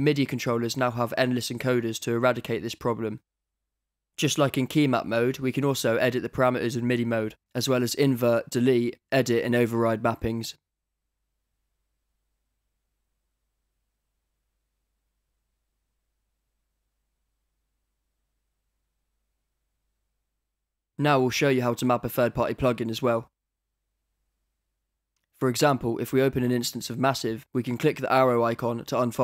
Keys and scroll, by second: 12.8 Return.